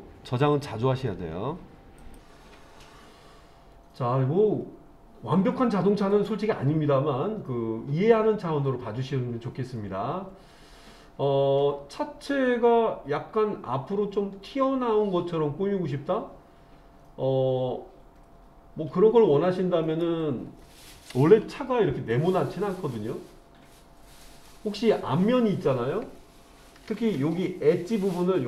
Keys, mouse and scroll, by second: 4.0-20.0 middle drag, 21.4 KP_7, 23.1-23.7 scroll down 1, 23.7 middle click.